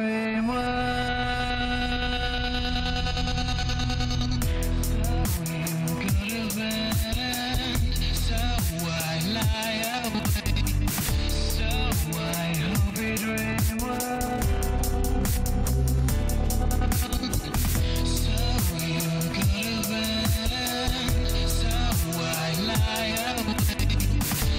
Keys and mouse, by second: 0.4 middle click, 11.2 click, 12.2 middle click, 13.9 click, 14.3 click, 14.5 click, 14.6 click, 16.7-21.9 drag, 22.9 click, 23.7 click, 23.8 click.